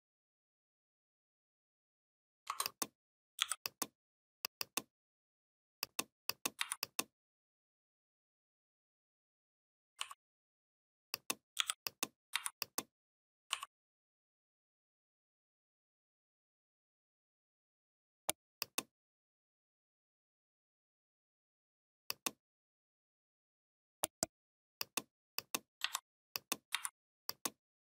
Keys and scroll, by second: 3.2 i, 6.4 v, 11.4 i, 12.1 v, 25.6 3, 26.6 v.